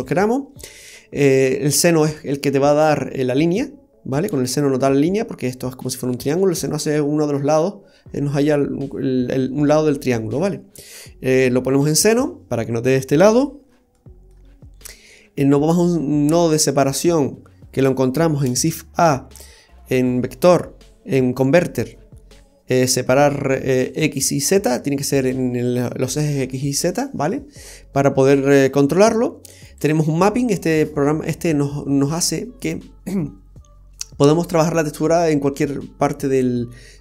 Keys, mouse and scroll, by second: 0.9-1.3 scroll up 3, 13.7-14.0 scroll down 3, 14.0 middle click, 18.5 shift+a, 29.8 click, 35.1 click.